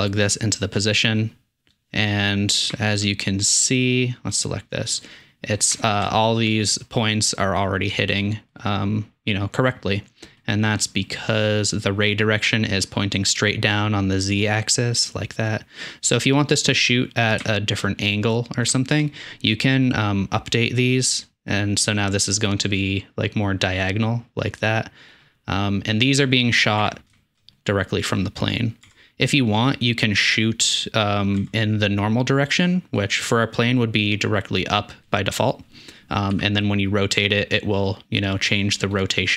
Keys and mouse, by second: 2.7-3.0 shift+middle drag, 4.4 middle click, 4.9 middle click, 5.4-6.0 shift+middle drag, 6.7 middle drag, 8.5 middle click, 16.2 middle click, 17.4-17.8 shift+middle drag, 18.7-20.0 shift+middle drag, 25.2 middle click, 26.8 Tab, 27.1 shift+middle click, 29.0 Tab, 31.4 middle click, 31.5 Tab, 32.3 middle click, 36.4 r, 39.2 middle click.